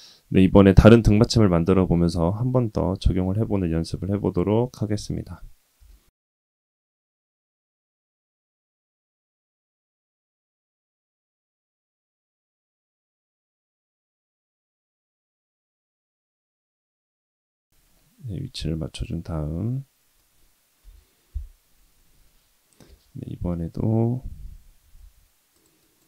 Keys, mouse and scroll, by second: 4.2 click, 5.8 shift+a, 6.7 click, 6.9 click, 7.0 shift+a, 7.7 middle click, 7.9 g, 8.5 click, 9.2 scroll down 2, 9.4-15.6 typing, 9.9 middle click, 11.1 middle click, 11.8 middle drag, 16.1 middle click, 16.4 middle click, 16.7 s, 17.1 g, 17.6 scroll up 2, 17.7-20.2 middle drag, 20.8 KP_1, 22.8 Tab, 25.0 ctrl+r.